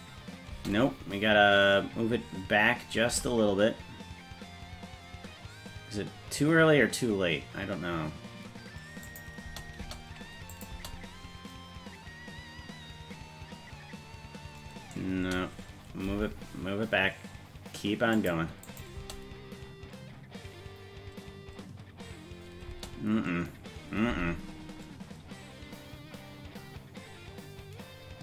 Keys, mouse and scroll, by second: 0.6 space, 3.2 g, 9.5 space, 9.9 space, 10.6 click, 10.8 space, 15.3 space, 16.1 g, 18.7 click, 19.0 space, 22.7 space, 24.1 g.